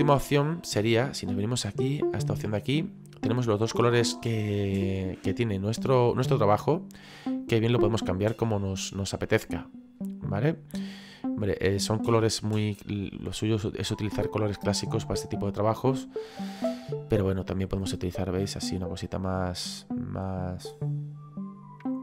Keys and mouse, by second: 1.3 middle click, 2.8 middle click, 5.6 middle click, 7.0 click, 8.0 click, 9.6 click, 11.1 click, 14.6 middle click, 15.8 click, 19.8 click.